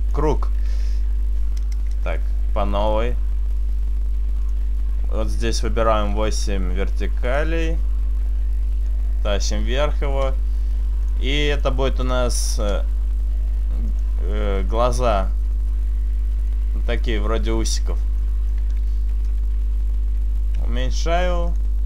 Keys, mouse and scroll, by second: 1.9 Delete, 2.9 click, 5.5 click, 8.9 click, 11.1 click, 11.5 click, 14.0 click, 14.7 right click, 15.1 shift+right click, 15.5 shift+right click, 15.9 shift+right click, 16.6 shift+right click, 17.1 shift+right click, 17.6 shift+right click, 18.3 shift+middle click, 19.1 KP_Decimal, 19.1 KP_3, 20.7 s, 21.6 click.